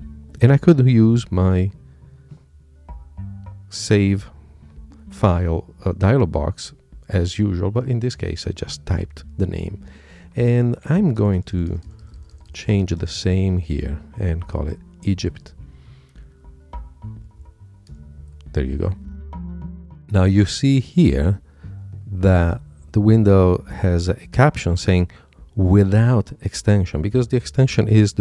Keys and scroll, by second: 16.8 Left.